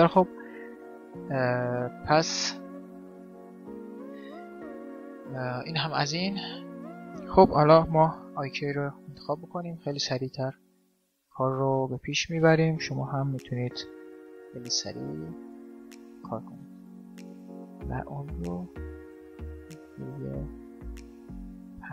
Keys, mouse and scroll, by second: 0.3-2.8 right drag, 3.3 ctrl+z, 4.2-6.0 drag, 9.5-11.3 drag, 11.5-13.3 drag, 17.0-21.4 drag, 20.3 middle click, 21.4-21.9 middle drag.